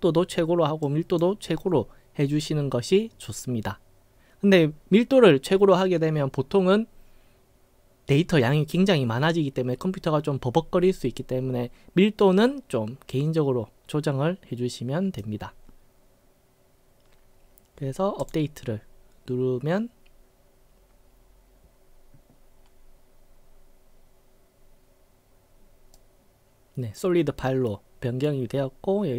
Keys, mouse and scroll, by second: 0.9-1.2 drag, 12.4-15.2 drag, 18.2 click, 26.0-28.3 right drag.